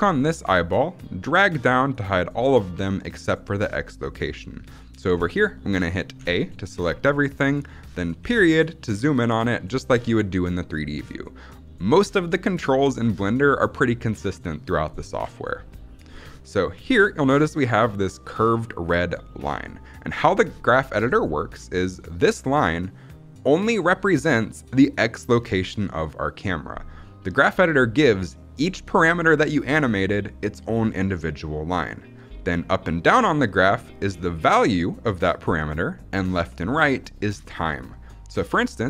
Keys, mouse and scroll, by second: 6.1 a, 8.1 KP_Decimal.